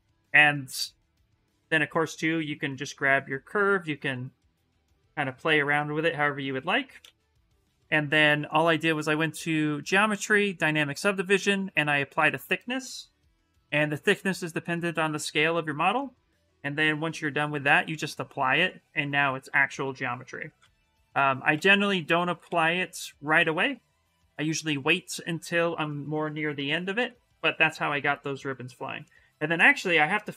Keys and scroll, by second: 6.1 ctrl+z, 6.8 ctrl+z, 12.8 shift+m, 14.3 shift+m, 19.1 shift+f, 20.4 ctrl+z, 20.8 ctrl+z, 21.6 ctrl+z, 22.2 ctrl+shift+z, 26.4 shift+f.